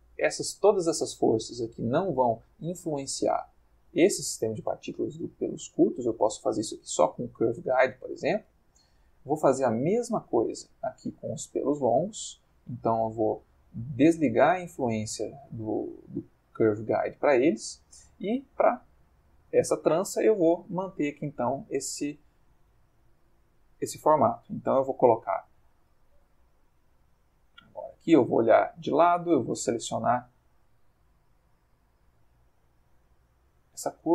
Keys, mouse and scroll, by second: 0.2-1.7 drag, 1.9 click, 3.0 middle click, 3.7 middle click, 5.0 middle click, 5.6 middle click, 7.3-9.0 drag, 9.3 middle click, 10.3 middle click, 11.2 click, 12.0 middle click, 14.5-16.7 drag, 17.2 middle click, 18.2 middle click, 19.0 click, 20.6 click, 21.2 Tab, 22.0 click, 22.5 g, 25.5 Escape, 28.2 click, 29.3 a, 31.2 g.